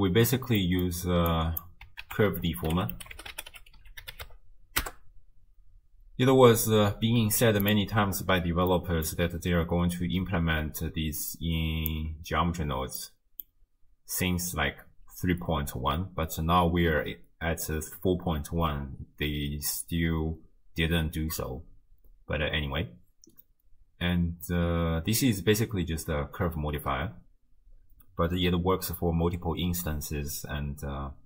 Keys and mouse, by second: 0.6 click, 0.8 middle click, 1.3 click, 2.0 ctrl+a, 8.7 middle click, 11.5 click, 13.0 click, 13.1 middle click.